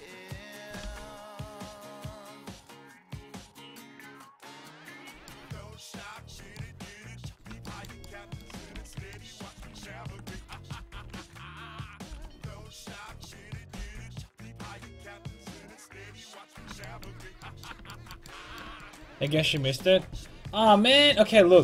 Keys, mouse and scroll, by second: 0.8 c, 8.8 z, 10.3 z, 10.9 alt+z, 12.1 c, 13.8 c, 17.5-21.3 middle drag.